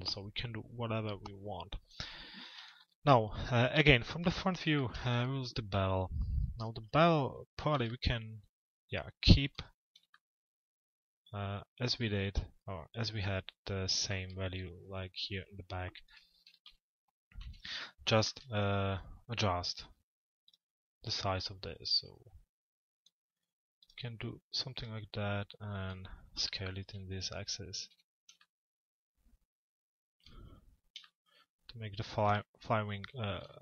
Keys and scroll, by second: 2.2 f, 2.8 z, 6.4 p, 7.4 z, 16.0 t, 17.7 z, 26.6 p, 27.9 z.